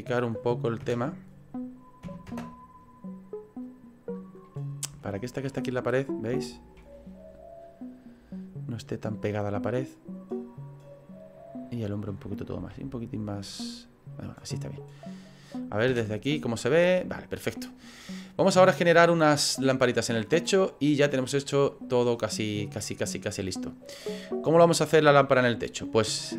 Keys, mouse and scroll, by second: 0.8 KP_0, 2.5 KP_0, 3.9 click, 4.5 middle click, 5.0 shift+middle click, 5.6-6.3 scroll up 3, 6.3 shift+middle click, 7.3 right click, 7.7 scroll up 3, 8.2-9.2 scroll down 5, 10.0 click, 14.3 middle click, 14.3 s, 15.9 KP_0, 22.3 click, 22.3-22.8 scroll down 3, 22.7 scroll up 2, 26.2 middle click.